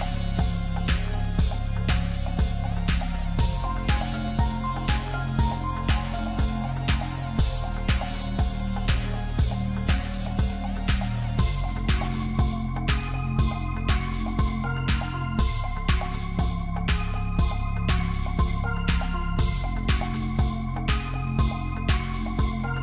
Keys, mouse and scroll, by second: 2.8-3.4 scroll down 3, 3.4-5.2 middle drag, 5.2-5.7 scroll up 1, 5.7-6.8 middle drag, 6.8 KP_1, 8.3 shift+a, 12.1-13.9 scroll down 4, 13.9 g, 18.7-19.6 scroll up 2, 19.6 Tab, 20.4 shift+z, 20.8 s.